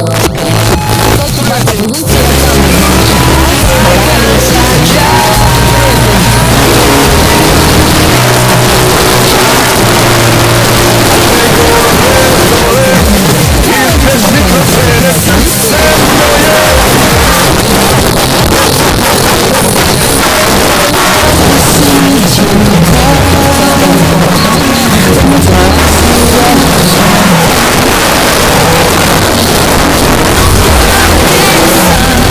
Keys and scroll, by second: 8.2 Page_Down, 17.4 Page_Down, 27.3 Page_Down.